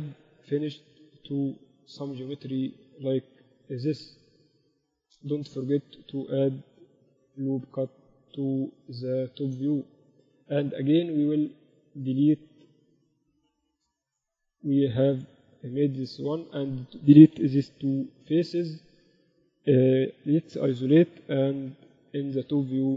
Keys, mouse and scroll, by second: 3.2-4.9 drag, 3.5-5.8 right drag, 4.1 z, 4.7 z, 5.8 middle click, 6.3 click, 6.5-8.1 right drag, 7.1 ctrl+r, 10.4-12.5 drag, 10.7-12.5 right drag, 13.7-16.1 typing, 17.5 x, 20.5 KP_Divide, 21.2 KP_7, 22.0 a, 22.5 a.